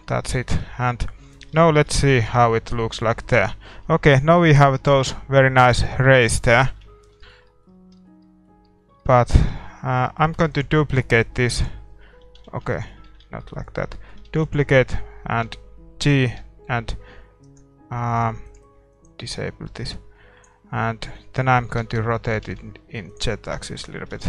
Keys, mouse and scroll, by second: 2.2 shift+z, 5.0 middle click, 6.7 shift+z, 6.9-7.2 scroll down 1, 8.7 Tab, 9.5 a, 10.5 shift+d, 11.4-13.1 drag, 11.4-12.5 middle drag, 12.5 ctrl+z, 12.7-16.6 middle drag, 13.1 ctrl+z, 14.3 shift+d, 15.7 g, 19.9-21.7 drag, 21.2 middle click, 21.7 r, 23.5 Tab, 24.2 middle click.